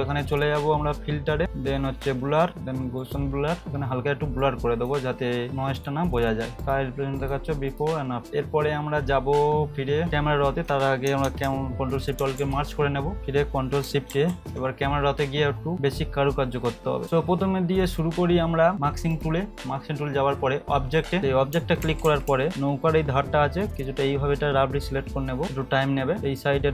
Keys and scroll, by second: 12.2 ctrl+alt+shift+e, 14.1 ctrl+shift+a, 21.5 [, 21.8 [, 22.0 [, 22.3 [, 26.2 [.